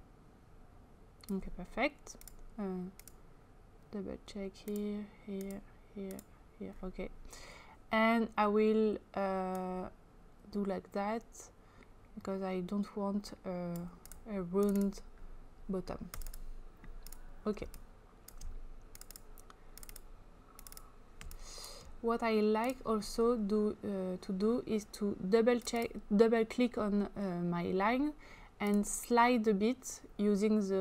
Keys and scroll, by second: 17.6 space.